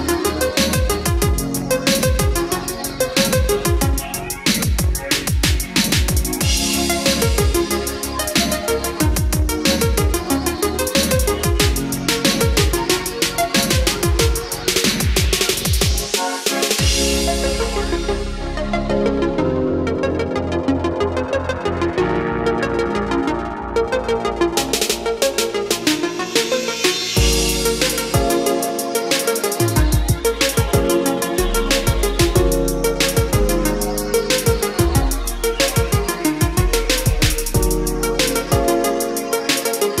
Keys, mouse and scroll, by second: 8.8-9.2 scroll down 1, 9.2-10.9 middle drag, 11.5-18.7 drag, 18.7-19.7 scroll up 1, 19.7-21.1 drag, 21.4-21.9 scroll up 1, 24.6-37.0 drag, 37.0-40.0 middle drag.